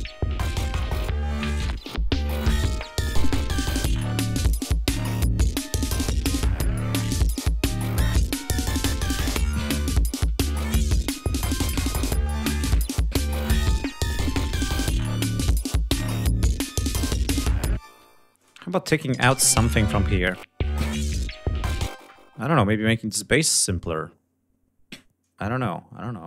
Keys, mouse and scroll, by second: 4.7 g, 5.5 ctrl+scroll down 2, 6.4 scroll up 2, 7.1 ctrl+scroll up 2, 7.9-8.2 scroll down 2, 9.7 ctrl+scroll up 2, 11.7 ctrl+scroll down 2, 12.5 scroll up 2, 13.1 scroll up 2, 14.5 ctrl+scroll up 2, 15.9-16.6 scroll up 4, 16.7 scroll down 2, 17.6 space, 18.0 click, 18.9 space, 19.2 click, 20.5 scroll up 2, 21.7 space, 21.8-22.1 scroll up 2, 22.7 click, 25.8 click.